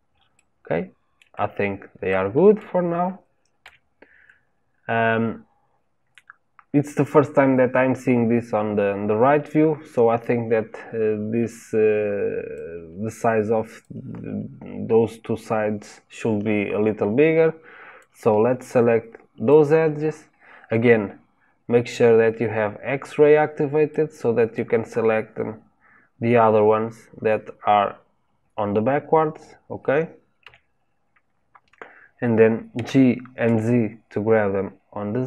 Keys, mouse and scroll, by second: 0.3-3.6 middle drag, 3.6 KP_3, 12.5 click, 17.9 click, 23.9-26.9 middle drag, 30.4 KP_3, 32.7 g.